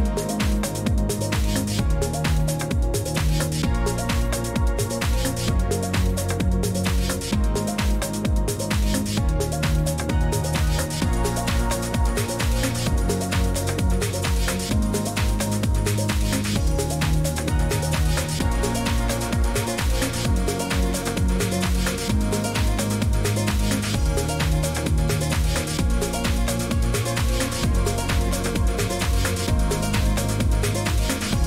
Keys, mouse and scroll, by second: 1.2 click, 2.4 click, 3.9 click, 4.5 click, 5.8 click, 7.9 click, 9.0 3, 11.9 2, 14.6 Return, 16.4 Return, 19.6-20.6 typing, 20.6 Return, 22.3 Escape, 25.1-25.9 drag, 29.6 click, 30.7 click.